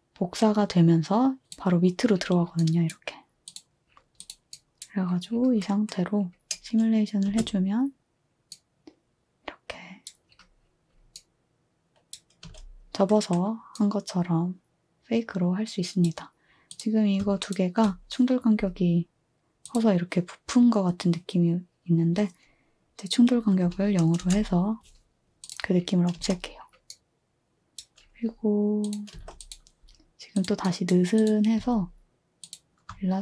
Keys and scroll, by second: 7.3 space, 12.4 space, 23.6 0, 24.2 Return, 26.1 space, 29.1 space, 31.6 z.